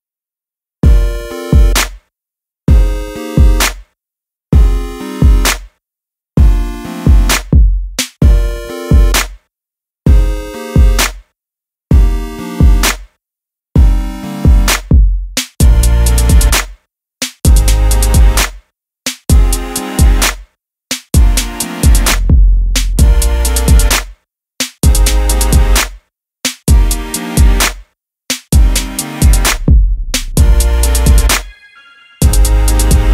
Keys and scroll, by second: 24.8 Return.